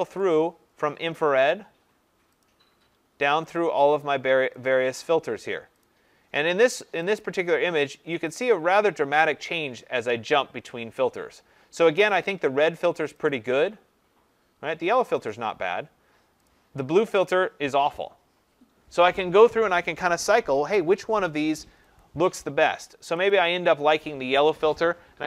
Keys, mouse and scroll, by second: 0.3 click, 1.5 click, 2.4 click, 3.6 click, 4.6 click, 8.4 click, 22.0 click, 23.3 click.